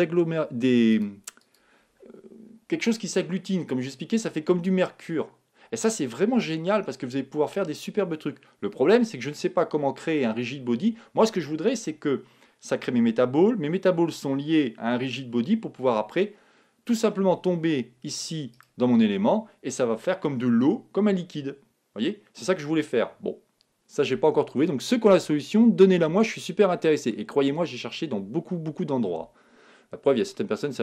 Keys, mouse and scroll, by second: 0.9-3.2 drag, 18.5-20.4 right drag, 23.9-24.6 scroll down 1, 24.6-26.4 middle drag, 30.3-30.8 middle drag.